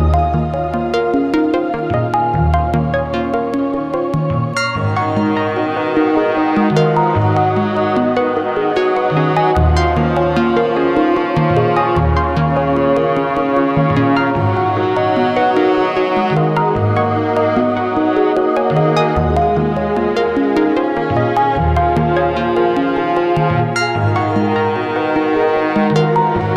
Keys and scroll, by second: 0.7 i, 1.5 k, 5.2 i, 5.5 k, 9.9 i, 10.9 k, 12.9 i, 13.7 k, 17.2-18.8 typing, 23.6 i, 24.9 k.